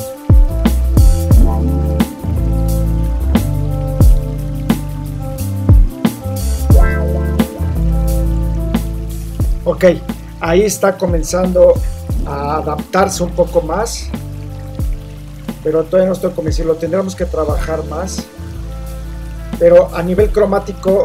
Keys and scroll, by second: 5.4 super+-, 5.4 super+t, 5.7 Return, 6.4 shift+super+t, 7.6 shift+Return, 7.8 super+0.